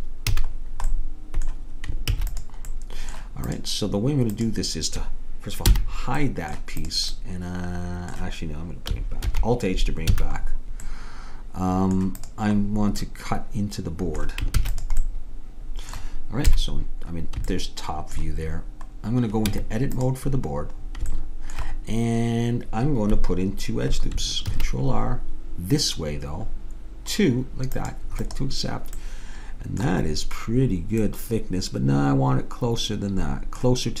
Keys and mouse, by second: 0.4 a, 2.2 ctrl+s, 3.6-6.4 drag, 5.8 h, 6.9-8.7 drag, 9.3 alt+h, 10.2 a, 11.0 click, 12.2-14.1 drag, 14.2 middle click, 14.6 ctrl+s, 16.5 KP_7, 19.6 Tab, 24.5 ctrl+r, 29.0-32.2 middle drag.